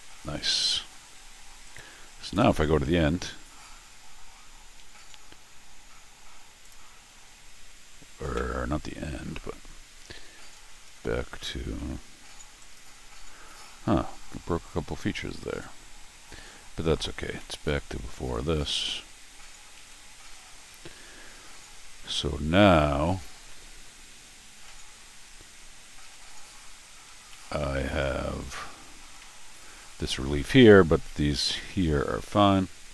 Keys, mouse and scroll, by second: 1.6 click, 2.2 ctrl+alt+shift+r, 6.6 click, 6.9 f, 10.6-11.3 scroll down 6, 12.6 click, 13.5 ctrl+alt+r, 17.0 scroll up 1, 17.4 middle click, 18.7 click, 19.8 ctrl+alt+r, 21.8 middle click, 23.5 middle click, 24.3 scroll up 1, 24.6-26.1 middle drag, 26.7 scroll up 4, 27.1 scroll down 2, 27.3 middle click, 28.0 scroll down 2, 28.6-29.2 scroll up 6, 29.2 middle click, 31.1 middle click, 31.6 scroll up 1.